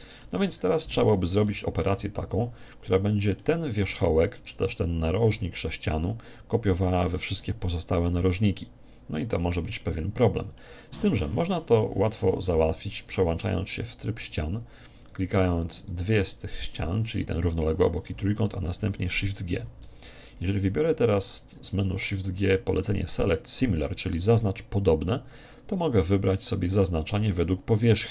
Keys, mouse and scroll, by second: 0.6-1.5 scroll down 1, 1.5-4.2 middle drag, 2.2 Tab, 4.4 right click, 9.8-13.6 middle drag, 13.1 ctrl+Tab, 15.0-17.6 right drag, 16.3-18.5 middle drag, 19.6 shift+g.